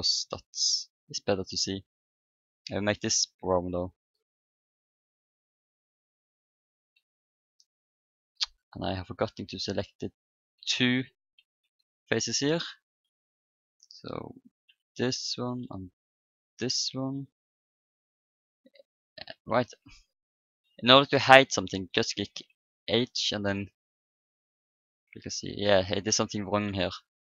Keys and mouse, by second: 2.1-4.8 drag, 6.7 Tab, 8.1 Tab, 10.2 Tab, 11.4 a, 12.3-14.4 middle drag, 14.4 click, 15.0-16.0 right drag, 16.0 middle click, 16.5-18.2 right drag, 17.1-19.8 drag, 19.3 ctrl+z, 21.4-25.1 middle drag, 21.9 h, 23.4-25.1 drag, 26.4-27.2 right drag.